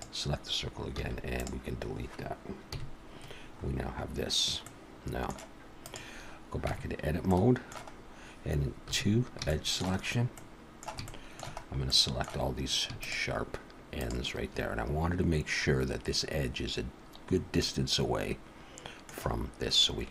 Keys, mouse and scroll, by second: 1.0 x, 2.7 KP_1, 3.5-3.9 scroll up 3, 4.6 middle click, 5.8 click, 6.7 Tab, 7.3 middle click, 8.0-8.4 scroll up 1, 9.0 2, 9.5 shift+middle click, 10.1 scroll up 1, 10.4 middle click, 11.1 shift+middle click, 11.6 scroll up 2, 11.9 middle click, 13.0 shift+click, 14.0 shift+click, 17.5 middle click, 19.7-20.1 scroll down 2.